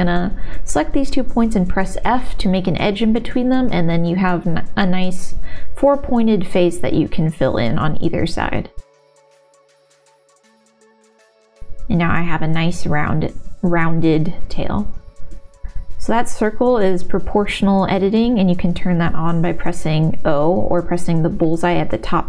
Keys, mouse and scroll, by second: 0.1 1, 3.2 f, 3.8-5.7 middle drag, 6.3 click, 7.3 shift+click, 7.6 f, 9.0 shift+click, 9.3 shift+r, 9.8 middle click, 10.5 middle click, 11.8 2, 12.1 click, 12.2 middle click, 13.6 click, 13.6 g, 13.9 middle click, 14.1 ctrl+s, 14.8-17.6 typing, 15.5 click, 17.8 Tab, 18.3 click, 18.8 g, 19.7 click, 20.8 g, 21.6 g, 22.0 g.